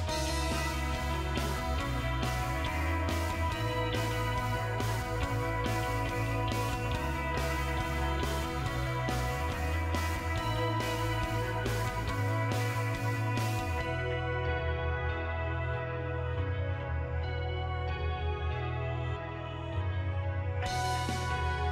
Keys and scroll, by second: 12.6 2, 13.8 BackSpace, 20.4 ctrl+c.